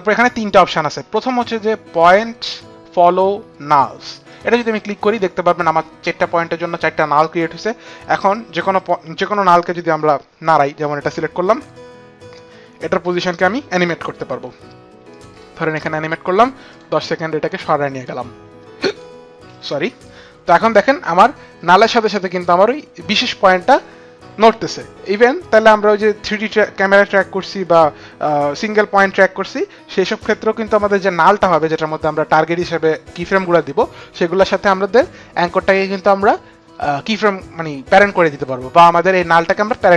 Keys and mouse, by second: 8.5 click, 9.0 p, 14.9 click, 16.5 click, 17.8 click, 20.7 click.